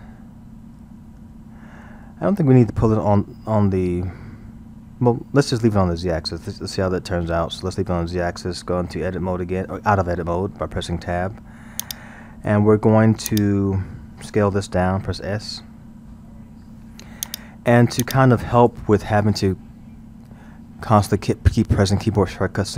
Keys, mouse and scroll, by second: 6.8 ctrl+z, 9.0 Tab, 11.8-15.4 drag, 15.4 s, 18.1-21.0 drag.